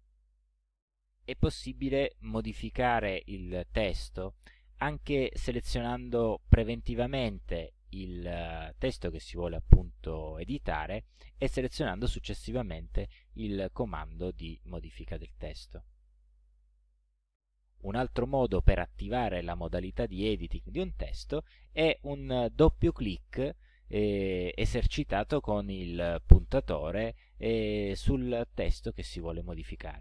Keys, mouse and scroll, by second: 0.4 click, 7.0 click, 15.1 click, 18.8 click, 19.8 click.